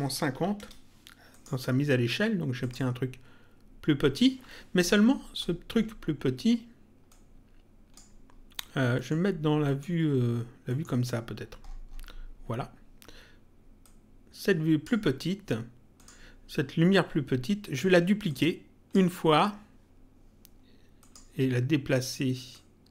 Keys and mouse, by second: 1.3 click, 2.5 click, 7.0 click, 8.9 middle click, 13.7 click, 15.9 click, 18.2 ctrl+click, 20.9 click, 22.5 click.